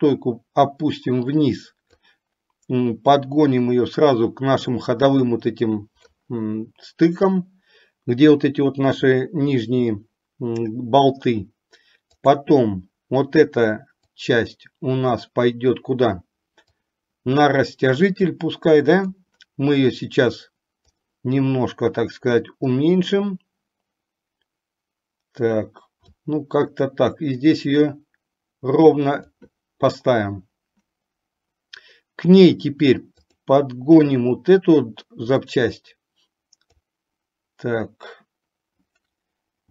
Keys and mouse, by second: 3.2-6.3 drag, 12.3 click, 14.4-15.5 drag, 16.8-19.5 drag, 21.0 click, 22.9-26.5 drag, 28.0-29.5 drag, 33.3 click, 35.5-37.1 drag.